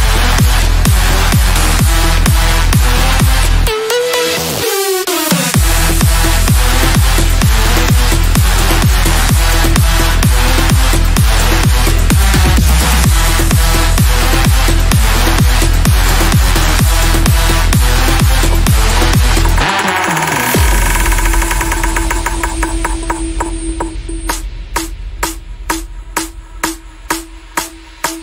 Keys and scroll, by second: 4.7 F3, 7.4 shift+F2, 14.6 F3, 20.0 shift+Page_Up, 20.5 shift+F2, 20.8 Escape.